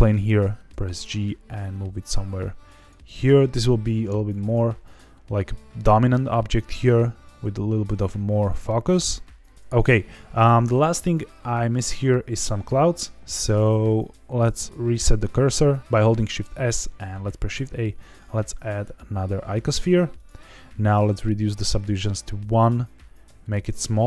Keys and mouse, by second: 0.7 g, 2.8 ctrl+click, 3.1 s, 4.4 click, 6.5 g, 14.1 shift+s, 17.3 shift+a, 21.8 click, 21.9 click, 23.2 s.